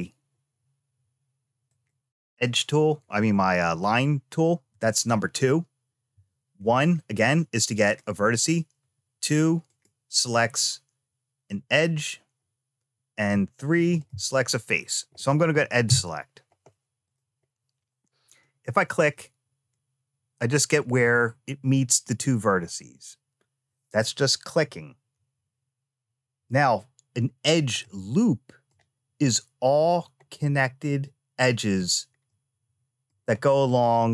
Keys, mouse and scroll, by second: 1.4 click, 4.5 2, 6.4 1, 7.6 click, 8.5 2, 9.4 click, 13.5 3, 13.7 click, 15.6 2, 16.8 click, 18.8 click, 27.6 middle click, 30.1-31.6 middle drag, 32.0 middle click, 33.2-34.1 middle drag.